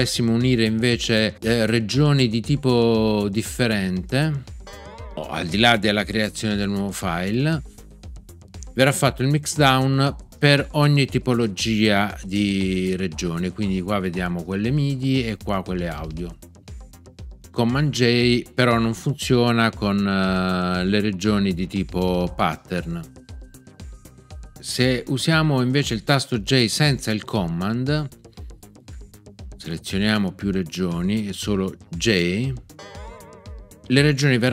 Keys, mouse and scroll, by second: 4.6 super+j, 32.7 j.